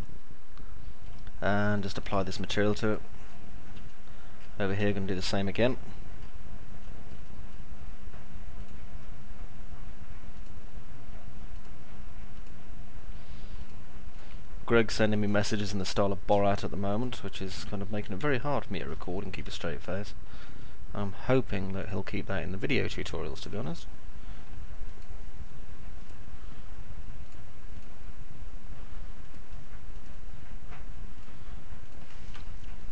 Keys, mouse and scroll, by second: 4.1 alt+middle click, 4.9-6.1 alt+middle drag, 6.9 middle click, 6.9 scroll up 2, 7.3 alt+middle click, 10.3 ctrl+click, 11.4 ctrl+click, 12.3 ctrl+click, 13.4 ctrl+click, 15.1 ctrl+click, 17.3 ctrl+click, 18.1 alt+middle click, 19.1 alt+middle click, 20.3 middle click, 23.3 ctrl+click, 25.9 ctrl+click, 29.9 ctrl+click, 31.1 ctrl+click.